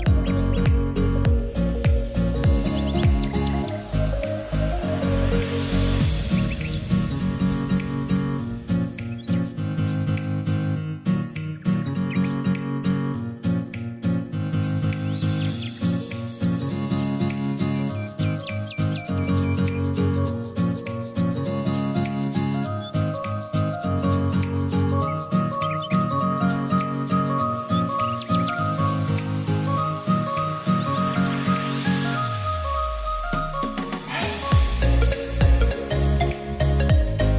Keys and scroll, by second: 22.6-23.6 typing, 24.1 Return, 24.9-26.0 typing, 27.0 Return, 28.4-29.2 typing, 35.9 r.